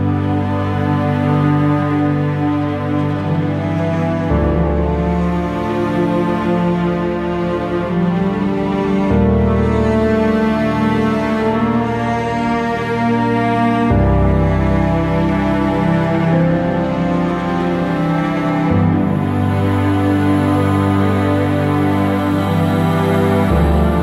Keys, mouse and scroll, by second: 0.4 click, 0.6-7.0 shift+middle drag, 0.9-1.3 scroll up 2, 3.2 s, 7.0 g, 8.0 click, 13.4 g, 16.5 click, 16.7-17.5 scroll up 1, 18.3 g, 19.6 click, 20.6 g, 21.8 ctrl+z, 22.1-22.5 scroll down 1, 22.5 scroll up 1, 23.5 g.